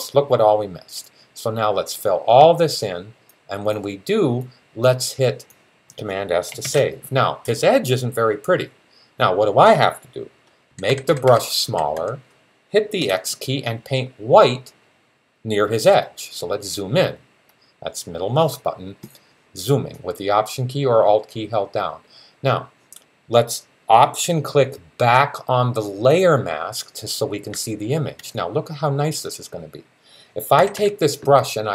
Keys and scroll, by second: 6.4 super+s, 10.5-11.7 typing, 12.8 typing, 30.4 [, 30.6 [.